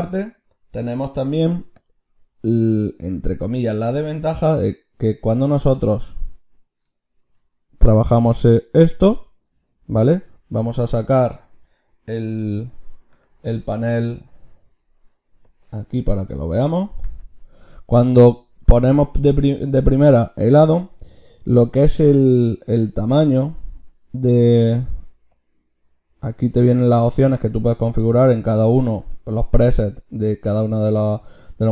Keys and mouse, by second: 7.0 ctrl+shift+q.